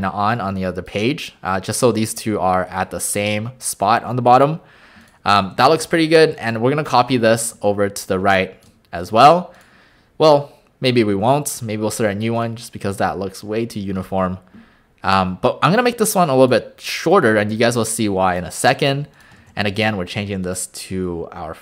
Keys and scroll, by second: 5.6 a, 6.3 a, 7.4 a, 11.2 e, 19.4 alt+a.